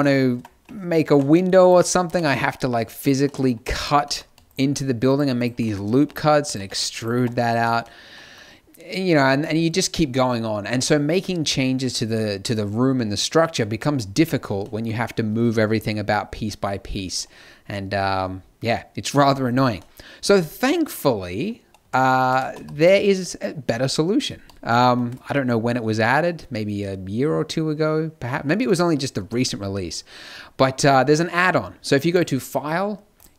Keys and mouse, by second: 0.3 Tab, 1.0 ctrl+r, 2.1 ctrl+r, 5.9 e, 6.5 x, 7.1 Tab, 7.5 z, 14.6-20.3 middle drag, 21.7 a, 22.2 a, 22.4 x, 29.6-32.0 middle drag, 32.0-33.3 drag.